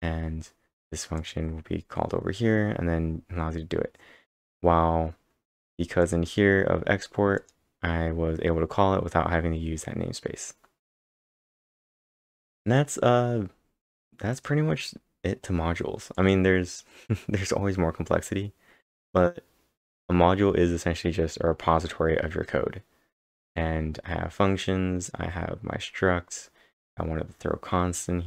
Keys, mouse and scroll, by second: 1.2 click, 6.0 F5, 6.0 click, 6.0 d, 7.4 click, 9.6-11.6 typing, 11.1 click.